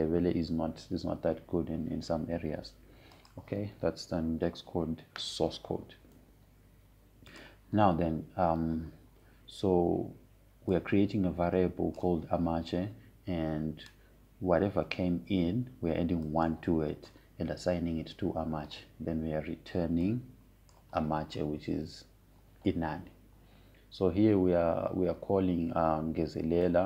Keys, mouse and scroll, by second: 4.8 click, 9.0 click, 12.4-16.2 drag, 18.0 click, 21.8-25.0 drag.